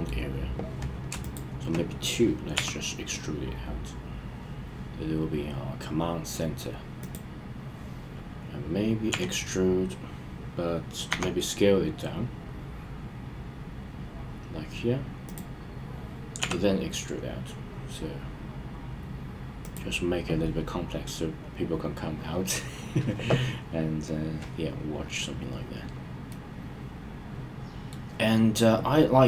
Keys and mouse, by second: 1.2 shift+click, 2.5 e, 7.0 click, 9.1 e, 11.1 s, 15.2 click, 16.4 e, 19.6 click, 26.2-27.9 middle drag.